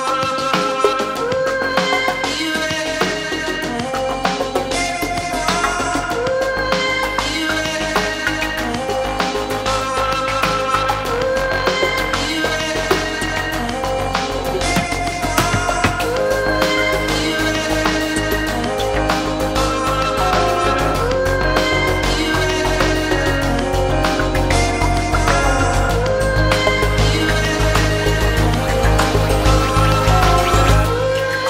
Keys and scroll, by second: 18.6 super+s, 20.2 Right, 20.6 2, 20.9 Return.